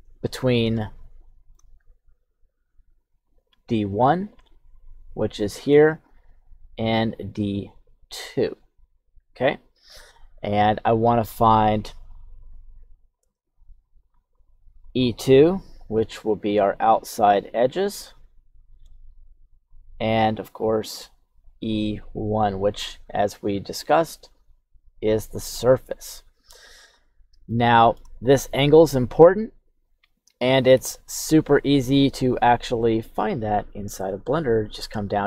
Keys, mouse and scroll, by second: 0.8 shift+scroll down 1, 0.8 shift+middle click, 1.5-2.3 shift+scroll up 1, 3.3 click, 3.8 click, 4.7 click, 6.4 click, 7.1 click, 7.9 click, 8.9 click, 12.1 click, 12.8 click, 13.9 click, 14.3 click, 14.8 click, 16.1 click, 16.6 click, 17.0 click, 17.5 click, 18.0 click, 19.7 click, 20.2 click, 20.9 click, 21.4 click, 22.0 click, 24.0 click, 24.6 click, 24.9 click, 27.5 shift+middle click, 31.2 Tab, 31.8 right click, 32.5 click, 33.2 right click.